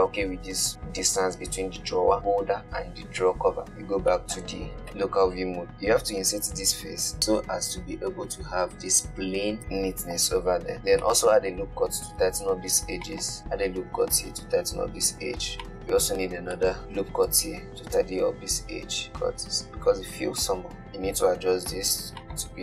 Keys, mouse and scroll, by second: 3.6 /, 3.9 scroll up 4, 4.2 shift+middle click, 4.9 KP_Decimal, 6.4-7.6 middle drag, 9.7-10.7 middle drag, 10.7-11.3 scroll down 3, 11.3-12.4 shift+middle drag, 12.4 ctrl+r, 15.7-16.2 middle drag, 16.2-16.8 scroll up 2, 16.8 shift+middle click, 17.5 ctrl+r, 20.7 g.